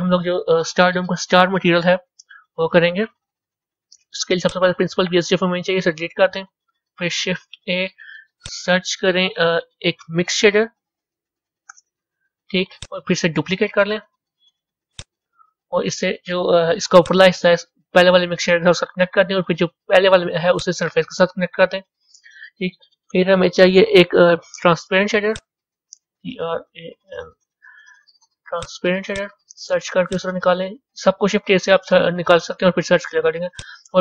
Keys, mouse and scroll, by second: 4.4 click, 5.9 Delete, 7.9 shift+a, 13.9 shift+d, 18.6 click, 20.4 click, 31.0-33.0 drag, 33.0-34.0 middle drag.